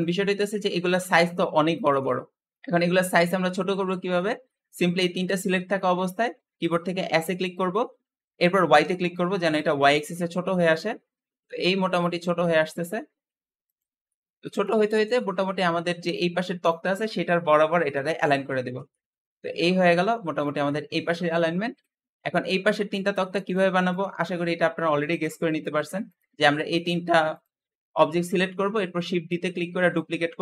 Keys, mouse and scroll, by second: 7.0 s, 13.9-14.7 middle drag, 14.7 scroll up 2, 15.0-18.6 shift+middle drag, 18.8-20.2 middle drag, 20.2 click, 20.5 middle click, 21.3 scroll down 4, 21.6-25.2 middle drag, 25.2-25.9 scroll up 2, 25.9 click, 26.6 shift+click, 27.1 shift+click, 28.3 scroll down 2, 28.6-29.5 middle drag, 29.5 shift+d.